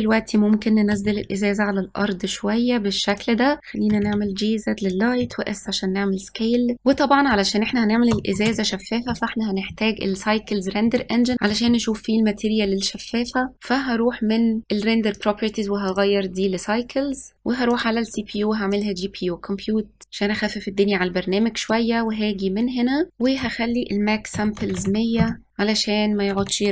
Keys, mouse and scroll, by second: 0.9 g, 3.6 click, 3.9 g, 5.2 s, 6.7-8.5 middle drag, 8.5 ctrl+s, 11.0 middle click, 11.3-11.9 scroll up 1, 13.5 click, 15.2-17.3 drag, 17.3 ctrl+s, 17.8-20.0 drag, 21.8 click, 23.3-24.8 drag, 24.8 KP_0.